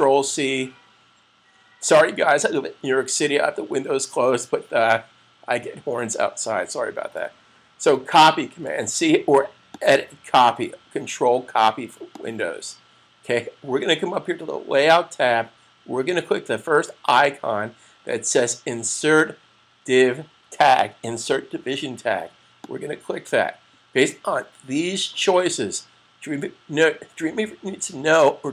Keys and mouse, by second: 8.5 super+c, 9.6 click, 22.5 click.